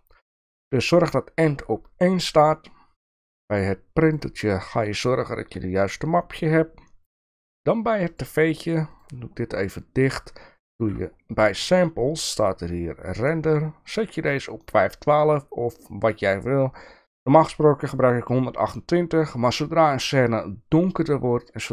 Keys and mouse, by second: 4.0 click, 8.1 click.